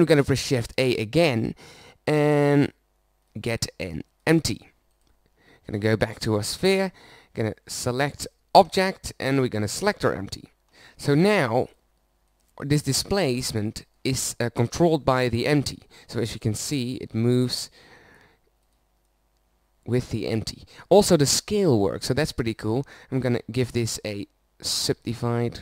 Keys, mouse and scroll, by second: 1.1 shift+a, 4.4 click, 5.5-7.4 middle drag, 11.1 middle click, 18.9 middle click, 19.8-21.0 middle drag, 21.2-23.3 middle drag, 24.1 Tab.